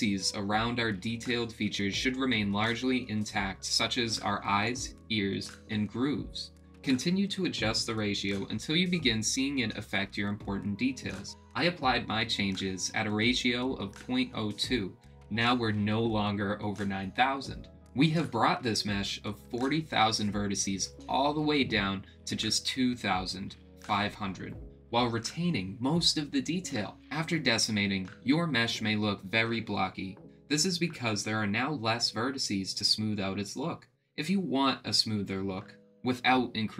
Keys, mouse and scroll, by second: 1.7-5.0 middle drag, 6.1-10.6 drag, 12.1 click, 12.6-14.0 middle drag, 14.5-16.8 drag, 17.2-20.8 middle drag, 23.5-26.2 drag.